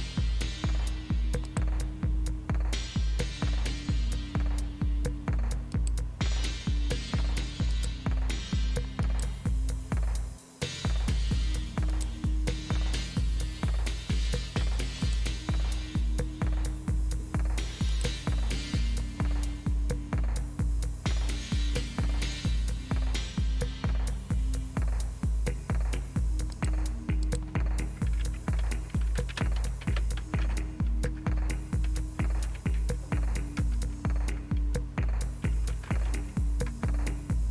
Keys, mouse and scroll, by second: 1.5 click, 5.7 click, 7.7 click, 9.0 click, 11.9 click, 15.0 click, 17.9 click, 20.3-23.4 scroll down 2, 26.5 click, 27.2 click, 28.9-33.6 typing, 35.8-36.6 typing.